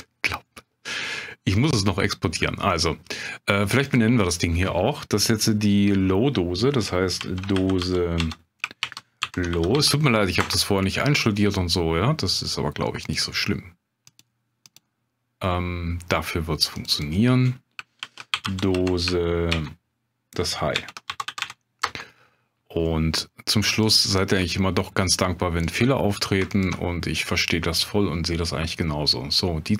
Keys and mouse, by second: 3.8-11.1 drag, 12.4 click, 13.0 click, 16.8 click, 16.9-23.0 drag, 23.7 click, 25.6 click, 26.5 ctrl+click.